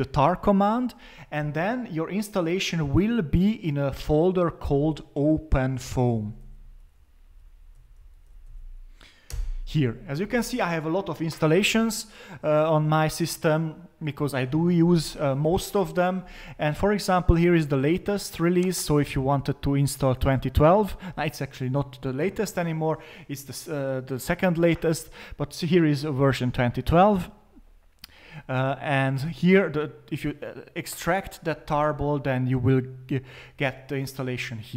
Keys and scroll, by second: 5.8-8.8 typing, 9.3 Return, 19.1-19.8 typing.